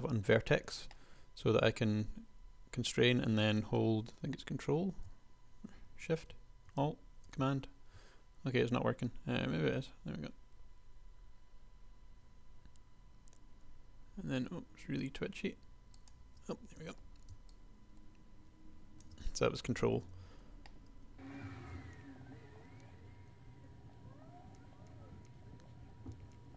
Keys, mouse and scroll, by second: 0.9 g, 16.9 a, 17.7 ctrl+click, 20.3 g, 21.3 a, 21.6 s, 21.7 g, 21.9 click, 22.8 a, 23.9-26.5 typing.